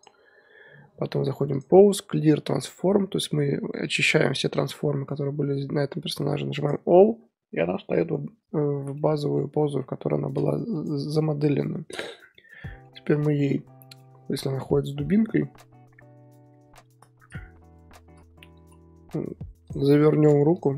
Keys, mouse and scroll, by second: 0.3 n, 1.5-4.7 drag, 8.9-10.7 middle drag, 10.7 click, 11.1 KP_1, 12.3-14.0 shift+middle drag, 14.0-14.4 scroll up 6, 14.9 r, 14.9 r, 20.5 click.